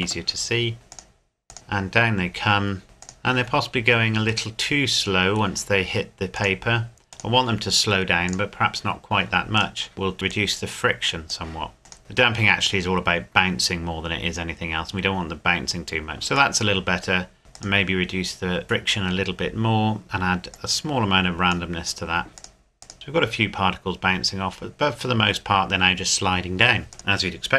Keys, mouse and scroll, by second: 0.9 click, 3.0 click, 4.5 middle click, 6.3 click, 9.5 right click, 9.9 click, 16.5 middle click, 17.5 click, 26.9 click.